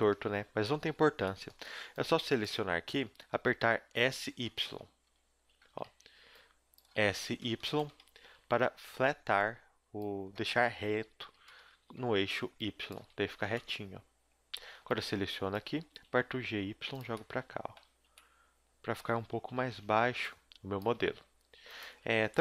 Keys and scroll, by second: 0.6 b, 1.8 b, 3.4 z, 3.9 s, 5.1 KP_3, 5.3 z, 5.7 a, 5.8 b, 6.9 s, 8.0 a, 8.3 b, 10.7 s, 11.7 a, 12.2 b, 13.0 s, 14.6 a, 14.8 b, 15.8 g, 17.8 z, 19.5 KP_3, 19.6 z, 20.0 b, 20.8 g, 21.9 z, 22.2 a.